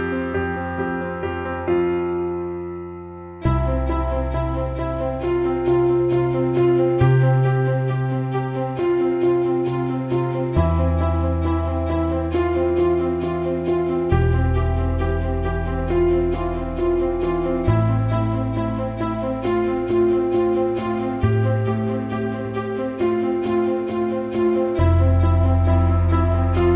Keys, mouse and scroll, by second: 1.0 alt+shift+middle click, 7.0 Tab, 7.9-9.2 right drag, 10.0 Tab, 11.9 click, 13.5-16.4 drag, 18.8-19.8 drag, 21.7 click, 22.5-24.0 drag, 24.7 click, 25.6 click.